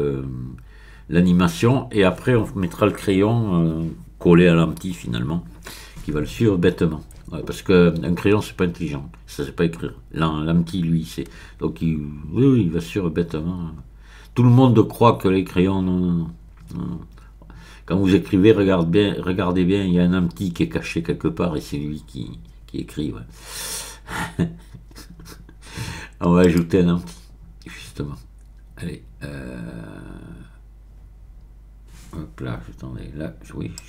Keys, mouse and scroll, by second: 26.4 click, 33.7 click.